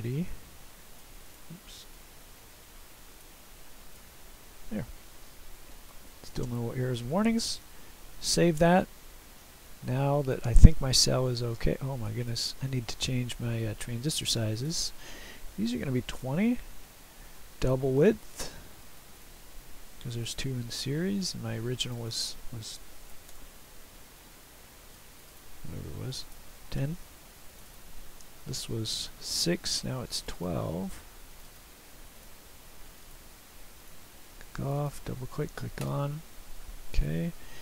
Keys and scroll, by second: 5.7 F5, 7.6 ctrl+s, 16.1 typing, 20.1 typing, 23.0 typing, 23.3 Return, 24.9 typing, 26.1 typing, 27.9 typing, 29.3 F12, 31.9 F12, 33.6 F12, 36.7 typing, 37.1 ctrl+s.